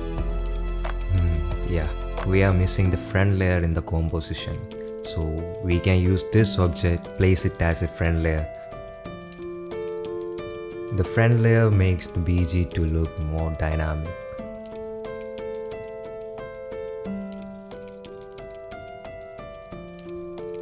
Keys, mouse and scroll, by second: 0.0 click, 0.0 right click, 1.1-2.3 drag, 2.7 middle click, 3.6 KP_7, 3.6 x, 3.6 z, 4.2 g, 5.8 KP_Decimal, 7.0 g, 9.6 g, 11.4 g, 13.3 s, 14.9 shift+middle click, 15.2-16.6 typing, 18.1 s, 19.0 shift+d, 19.3 r, 20.5 click.